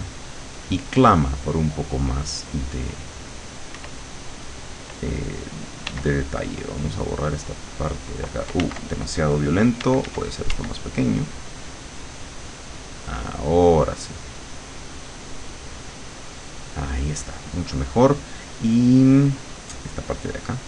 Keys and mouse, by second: 3.8 w, 5.9 e, 6.7-8.3 drag, 8.7 ctrl+z, 9.9 d, 10.9-12.9 drag.